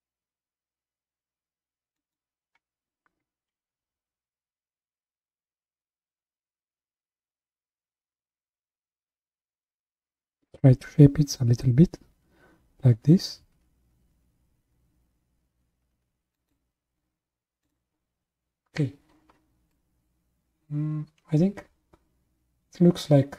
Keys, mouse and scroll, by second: 4.4 s, 17.6 click, 19.7-22.8 middle drag.